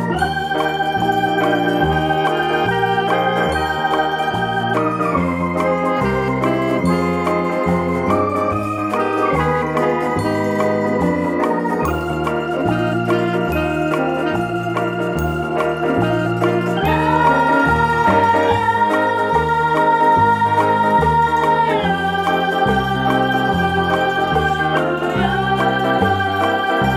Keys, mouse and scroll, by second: 0.2 a, 1.3 ctrl+v, 2.7 middle click, 3.9 f, 4.2 middle click, 4.7-5.2 scroll up 1, 6.8 z, 7.7 click, 8.0 middle click, 9.2 right click, 9.7 right click, 10.1 Tab, 11.0 right click, 11.4-12.7 middle drag, 12.7 right click, 13.4 KP_7, 13.9-14.2 scroll up 1, 14.2-15.2 shift+middle drag, 15.2 g, 15.4-19.1 middle drag, 20.1 shift+click, 20.4 middle drag, 20.6-22.9 middle drag, 20.6-21.2 scroll down 2, 21.9-22.9 scroll up 2, 22.9-26.1 drag, 26.1 middle click.